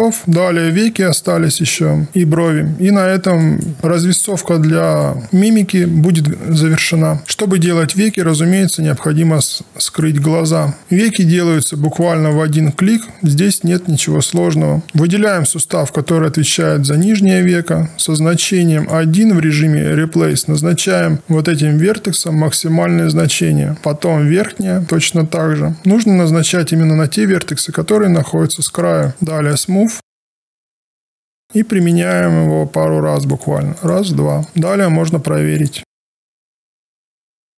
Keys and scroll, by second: 7.2 1, 10.5 q, 36.7 e.